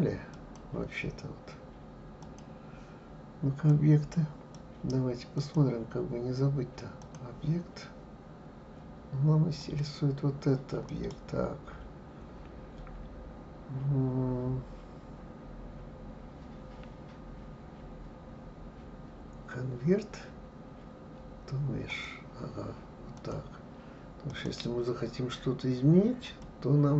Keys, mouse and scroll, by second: 2.2 click, 3.7 click, 5.4-8.4 drag, 9.6 click, 10.9-23.1 right drag, 23.1 click, 24.3-26.9 right drag.